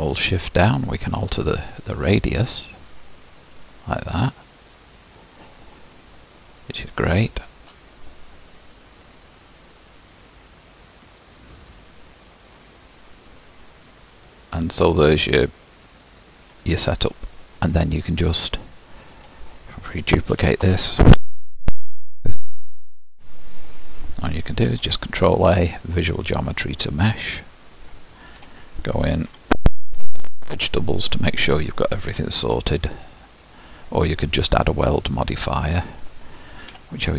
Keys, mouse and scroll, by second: 0.6-3.2 shift+drag, 9.1-12.3 middle drag, 17.1-17.7 scroll up 1, 17.7-18.3 scroll down 1, 18.3-20.4 middle drag, 20.4 shift+d, 21.5 g, 23.7-26.5 drag, 26.5 ctrl+a, 28.5 Tab, 29.4 a, 30.1 m, 35.3-36.1 scroll up 2, 36.8 2.